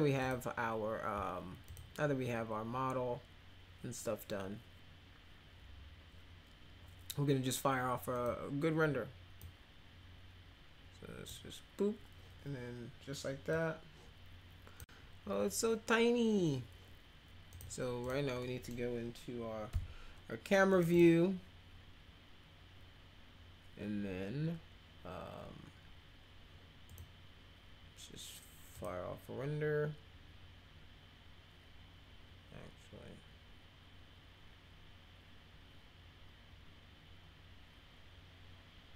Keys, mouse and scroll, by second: 0.2 click, 1.7 click, 8.1 click, 9.4-11.3 drag, 13.5-14.8 drag, 17.5 click, 18.0 click, 18.4 middle click, 19.7 c, 20.7 click, 20.9 click, 26.9 click, 28.7 click.